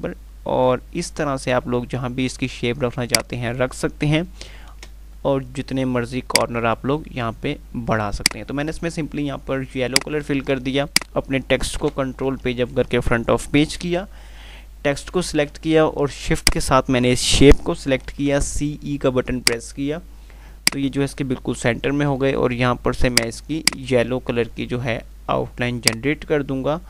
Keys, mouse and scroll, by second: 6.6 click, 10.2 right click, 11.1 click, 12.0 Page_Up, 15.9 Page_Up, 16.4 shift+click, 18.3 typing, 19.6 click, 23.3 click, 26.1 click.